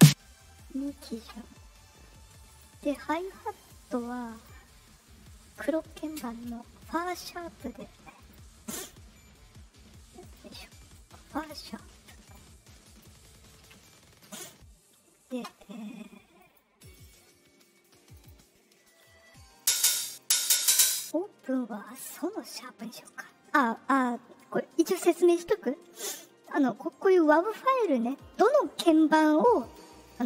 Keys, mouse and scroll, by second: 2.4 click, 4.3 click, 5.7 right click, 8.1 click, 10.2 click, 10.9 ctrl+click, 12.3 click, 13.6 r, 16.3 click, 16.8 click, 18.1 click, 19.5 click, 19.7 click, 20.1 click, 20.3 click, 20.5 click, 20.6 click, 21.9 right click, 27.4 click, 29.5 click, 30.0 click.